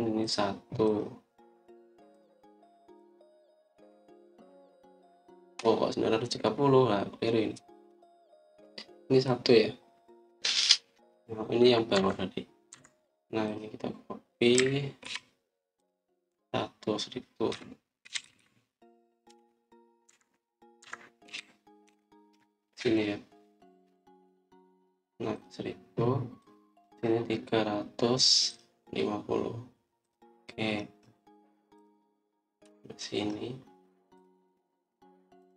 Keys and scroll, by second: 12.8 Escape, 13.6 Escape, 15.5-15.9 typing, 18.1-22.2 typing, 20.2 Return.